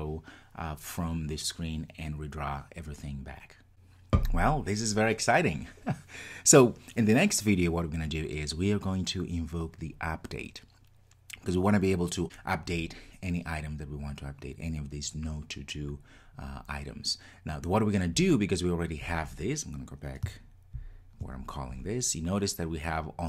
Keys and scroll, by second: 20.8 super+b.